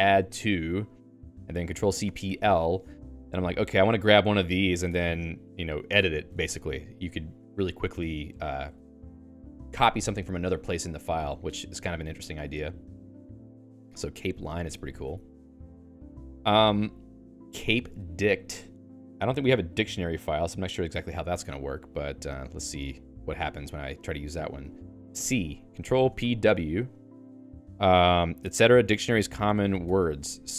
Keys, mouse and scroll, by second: 0.0-1.5 typing, 3.2 Down, 3.4 Down, 4.3 Return, 4.8 Escape, 5.1-8.9 typing, 12.0 Escape, 12.4 ctrl+s, 12.7-18.4 typing, 15.5 ctrl+s, 21.1-23.7 typing, 25.2 c, 29.8 Escape.